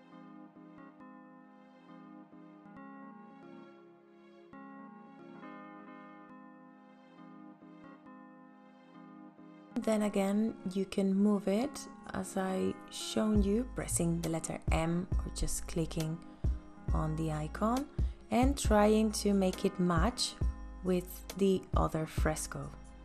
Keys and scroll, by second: 12.7 m, 21.6 v.